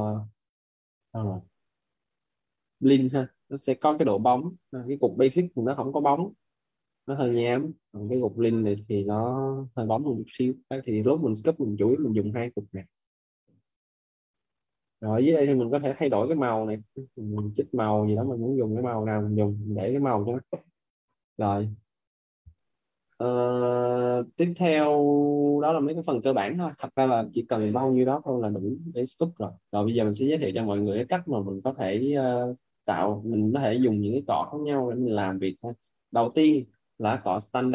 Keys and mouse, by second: 4.0 click, 11.6 click, 15.5 click, 30.4 alt+right click, 31.8 alt+right click, 33.8 alt+right click, 34.5 alt+right click.